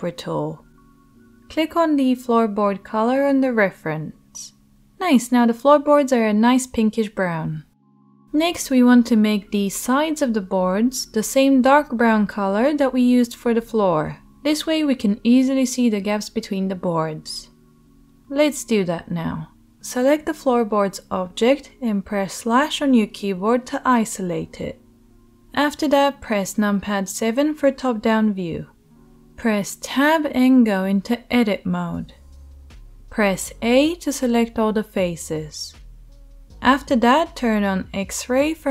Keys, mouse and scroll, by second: 5.9-6.4 shift+drag, 6.4-38.7 right drag, 25.5 KP_7, 29.1 Tab, 33.4 a.